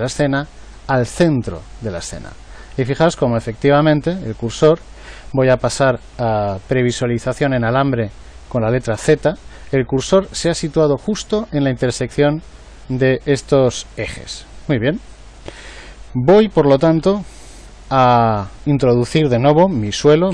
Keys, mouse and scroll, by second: 9.0 z, 12.2-13.2 middle drag, 17.0 KP_1.